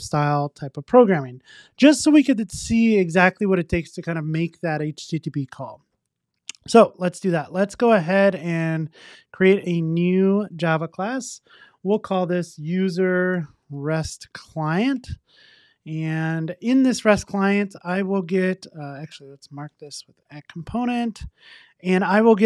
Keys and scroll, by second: 20.4 Return.